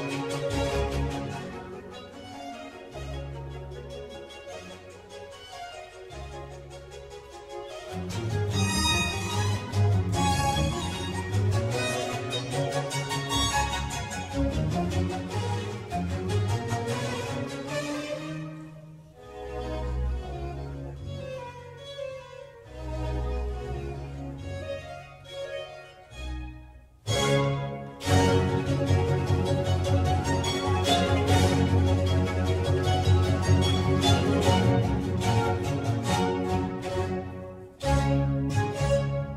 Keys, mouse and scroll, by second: 0.0-2.2 middle drag, 2.2 click, 2.8 Tab, 3.7-13.8 typing, 15.3 Return, 16.4-20.9 typing, 19.9 Return, 26.1-29.7 typing, 30.6 Return, 31.0-34.1 typing, 36.3 a, 36.6 r, 36.7 e.